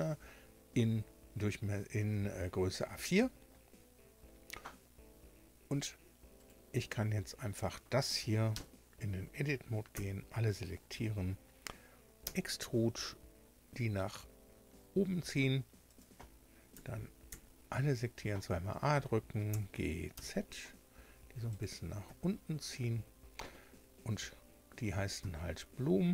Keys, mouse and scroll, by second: 6.3 right click, 8.5 Tab, 9.9 a, 12.2 e, 15.8 click, 16.7 a, 17.3 a, 19.5 g, 20.1 z, 21.5 click, 22.0 Tab, 25.1 Tab.